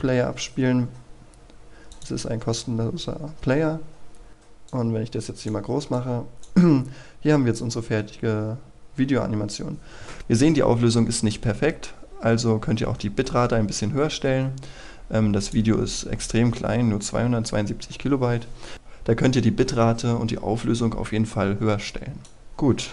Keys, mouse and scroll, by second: 1.9-22.9 drag.